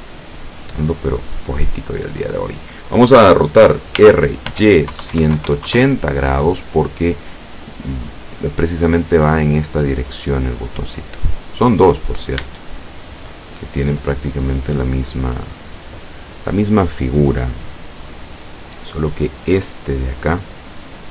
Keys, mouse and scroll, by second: 4.1-5.4 typing, 5.8 KP_Enter, 8.2-11.7 drag, 11.9 scroll up 1, 12.7 shift+middle click, 13.8-15.9 shift+middle drag, 18.3-18.7 scroll up 1.